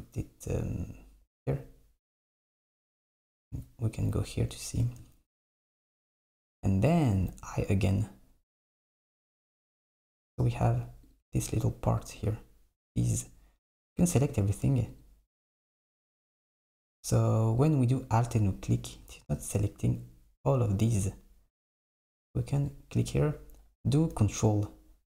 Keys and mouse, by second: 12.0 click, 12.9 click, 15.0 alt+click, 15.5 alt+click, 16.2 alt+click, 16.8 alt+click, 17.7 alt+click, 18.3 alt+click, 18.9 alt+click, 21.7 click, 22.6 click.